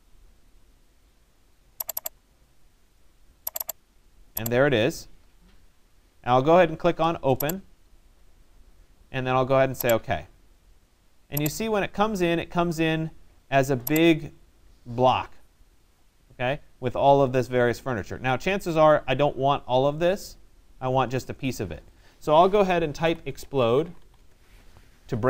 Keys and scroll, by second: 22.8 e, 24.4 Return.